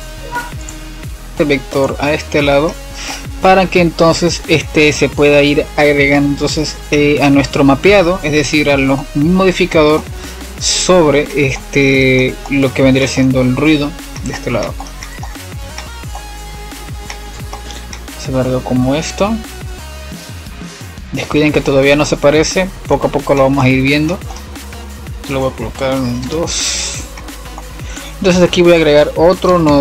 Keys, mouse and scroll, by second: 0.7-10.0 middle drag, 13.2-13.8 middle drag, 13.8 click, 14.3 click, 15.8 ctrl+t, 16.7-17.6 middle drag, 17.6 click, 18.1 click, 23.1 F7, 24.3-25.3 middle drag, 25.3 click, 25.9 click, 27.1 click, 27.7 click, 28.3 middle click, 28.7 click.